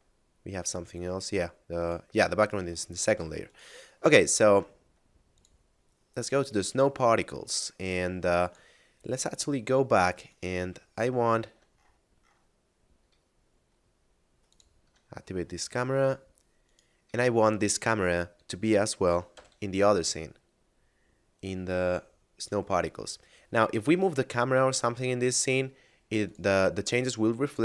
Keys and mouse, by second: 0.3 shift+middle click, 1.7 right click, 2.3 a, 2.9 shift+middle click, 3.5 right click, 4.3 shift+middle click, 5.4 click, 10.3 right click, 10.8 shift+middle click, 13.3 shift+middle click, 14.4 shift+click, 15.5 middle click, 16.6 right click, 17.3 shift+middle click, 22.4 click, 25.0 shift+middle click, 26.2 click.